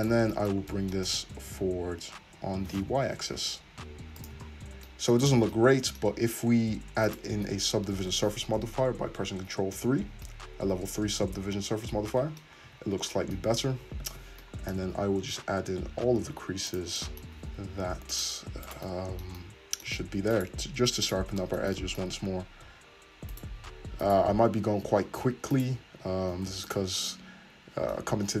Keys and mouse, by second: 0.0 click, 0.1-5.3 middle drag, 1.1 g, 4.7 Tab, 5.3 click, 5.5-7.1 middle drag, 7.1 click, 7.2-18.1 middle drag, 9.8 ctrl+3, 12.6 `, 13.8 Tab, 16.7 click, 18.1 alt+shift+click, 18.2 alt+shift+middle click, 18.7 alt+shift+click, 18.8 middle click, 19.4 middle click, 20.3 alt+shift+click, 20.4 alt+shift+middle click, 21.0 alt+shift+click, 21.1-23.3 alt+shift+middle drag, 23.3 alt+shift+click, 23.4 alt+shift+middle click, 24.0 alt+shift+click, 24.1 alt+shift+middle click, 24.7 ctrl+z, 25.5 alt+shift+click, 26.3 ctrl+z, 26.7 alt+shift+click.